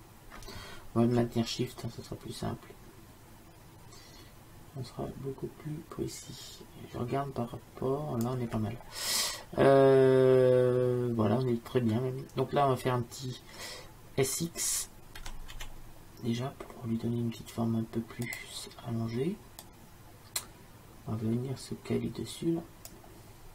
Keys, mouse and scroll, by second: 15.2 s, 19.7-21.6 drag.